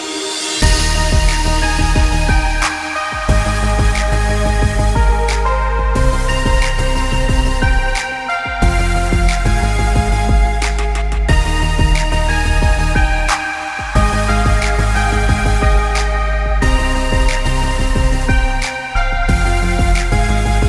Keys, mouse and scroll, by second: 2.0 alt+scroll down 1, 2.3 click, 10.7 click, 12.2 click, 17.1 alt+scroll up 1, 18.2 click, 20.5 Left.